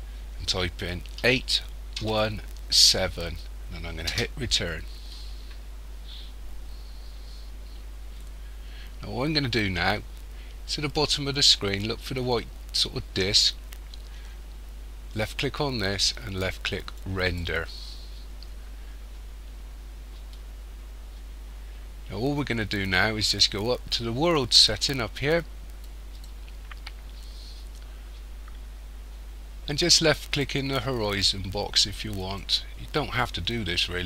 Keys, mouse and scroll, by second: 15.2 click, 17.3 click, 26.0 click, 32.2 click.